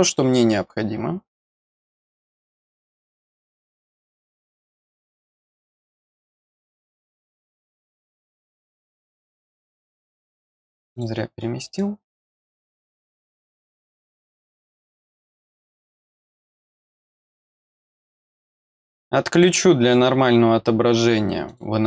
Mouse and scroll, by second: 0.5 scroll down 1, 1.7 click, 3.6 click, 5.3-7.0 drag, 8.2 click, 9.5 click, 10.3 click, 10.9 click, 11.7 click, 13.7 click, 15.5 click, 15.6 click, 16.3 click, 17.0 click, 19.3 click, 21.4 click.